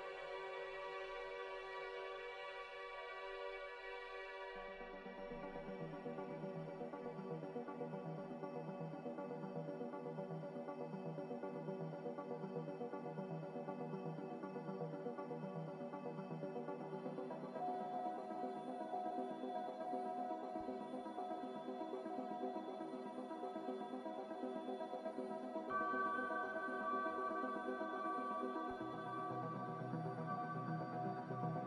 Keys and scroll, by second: 0.0 a, 1.8 typing, 2.5 Return, 9.6 typing, 9.9 Return, 15.7 typing, 16.3 Return, 18.4 ctrl+z, 18.9 ctrl+z.